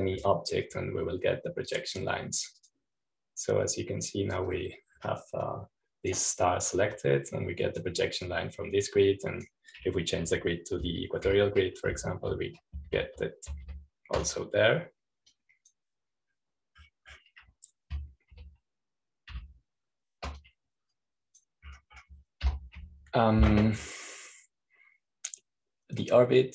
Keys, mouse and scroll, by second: 4.3-5.3 drag, 5.6-7.0 drag, 7.3-12.2 drag, 13.3 shift+q, 13.8 shift+e, 14.8 shift+q, 16.0 shift+q, 17.2-18.2 drag, 18.2-19.8 middle drag, 20.2 shift+q, 21.2 shift+e, 22.3 click, 24.0 click, 24.3 Home.